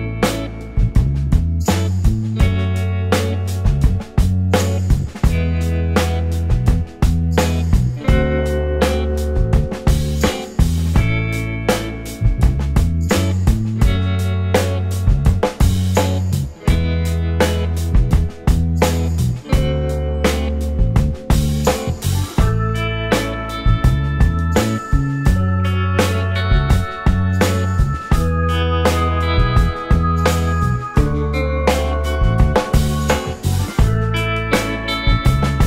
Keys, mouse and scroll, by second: 3.4 space, 4.0 space, 5.2 alt+middle click, 5.2 scroll up 1, 6.0 middle click, 8.5 space, 9.0 space, 9.8 alt+click, 10.6-11.0 alt+scroll up 2, 11.9 alt+middle click, 13.2 typing, 15.4-16.4 typing, 15.8-16.2 scroll down 2, 17.5 scroll down 1, 17.6 space, 18.1-18.5 scroll up 1, 18.5 d, 18.6 alt+scroll up 1, 18.7 alt+middle click, 19.5 Delete, 20.0-20.5 scroll up 1, 20.7 space, 21.2 space, 23.1 scroll up 1, 23.5 alt+click, 25.3 alt+click, 26.4 shift+click, 29.8 alt+click, 29.9 space, 30.4 space, 30.7 scroll up 1, 31.7 alt+middle click, 31.9-32.3 alt+scroll up 3, 32.3 scroll down 1, 32.4-33.7 scroll up 1.